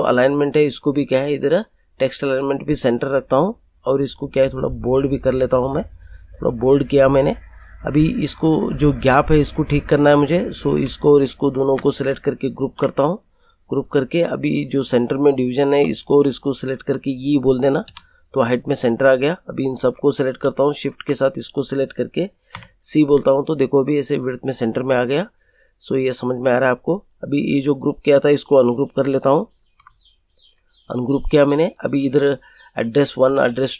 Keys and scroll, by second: 12.6 ctrl+g, 17.8 e, 22.5 c, 29.5 ctrl+u.